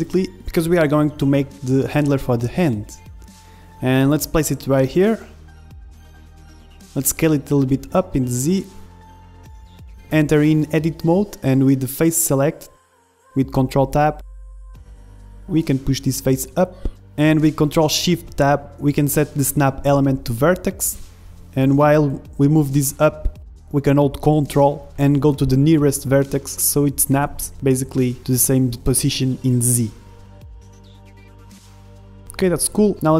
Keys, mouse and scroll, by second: 0.8-1.8 middle drag, 1.7 KP_1, 2.9-5.2 drag, 4.8-6.1 middle drag, 5.2 z, 5.6-6.9 drag, 6.5 s, 7.6-9.0 middle drag, 7.7 s, 10.0-11.9 drag, 10.0 KP_1, 11.2 Tab, 11.6 a, 11.9-13.0 middle drag, 13.0 ctrl+shift+Tab, 15.6-17.4 drag, 17.9 ctrl+shift+Tab, 22.3-25.1 drag, 25.3-27.4 middle drag, 25.7 z, 27.4 KP_1, 27.7 z, 28.2 middle click, 28.7 click, 29.6 middle click, 30.3-31.4 drag, 31.5 ctrl+r.